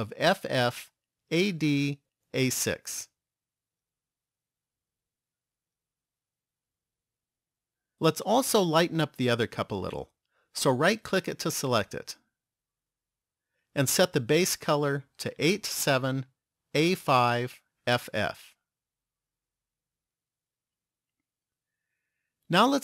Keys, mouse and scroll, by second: 0.8 f, 11.0 right click, 12.6 click, 18.3 f.